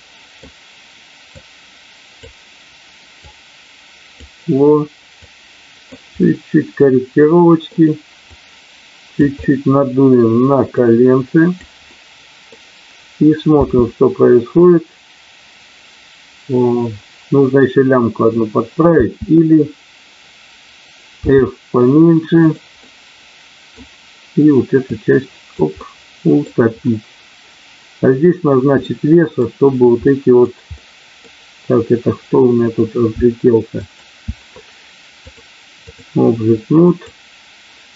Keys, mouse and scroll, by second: 1.3 click, 3.2 click, 5.2 click, 7.1 middle click, 8.3 click, 10.8 click, 12.0 middle click, 13.6 space, 19.0 space, 21.2 f, 22.7 middle click, 24.9 click, 25.9 middle click, 28.7 middle click, 30.0 middle click, 30.7 middle click, 33.6 alt+click, 35.4 click, 36.9 click.